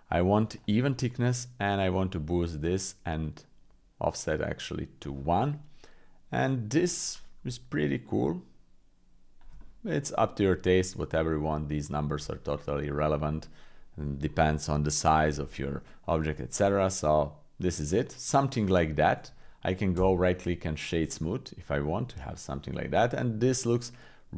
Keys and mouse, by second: 1.2-2.7 drag, 3.4-5.0 drag, 5.4-6.8 middle drag, 7.8-9.4 shift+drag, 9.6 middle click, 10.9-12.1 shift+drag, 12.9 middle click, 13.4 middle click, 15.9 middle click, 16.7 middle click, 17.9-19.3 middle drag, 19.9 w, 21.2 middle click, 22.7 click, 23.9 click.